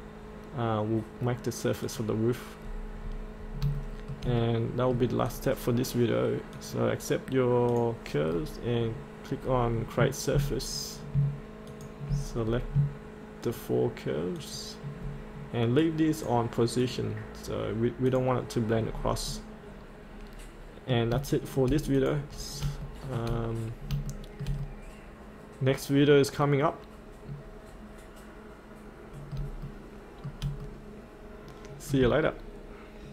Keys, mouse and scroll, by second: 1.8 click, 2.6-3.0 scroll up 1, 3.9 shift+middle click, 4.5 middle click, 5.3 click, 8.3-9.4 scroll down 1, 11.7 ctrl+click, 12.5 scroll up 1, 13.5 ctrl+click, 15.8 right click, 16.8 click, 18.8 scroll up 1, 19.3-21.1 middle drag, 21.4 shift+middle click, 22.0 click, 22.4 scroll up 1, 23.7-24.0 scroll down 1, 24.1 shift+middle click, 24.6-29.4 middle drag, 29.8 shift+middle click, 30.6 middle click.